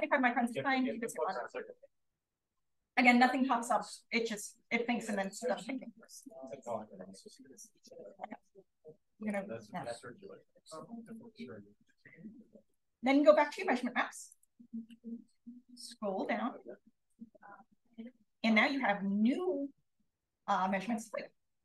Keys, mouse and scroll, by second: 0.7 click, 5.9 click, 7.7-9.2 right drag, 9.2 click, 11.0 click, 16.2-17.7 drag.